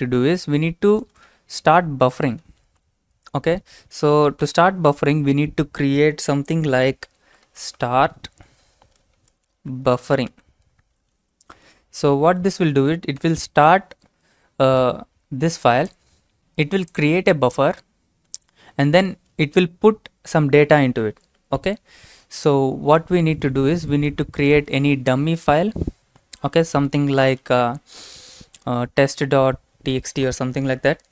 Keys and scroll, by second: 1.0-2.8 typing, 4.2-5.4 typing, 7.0-13.2 typing, 23.7 Return, 24.4-27.3 typing.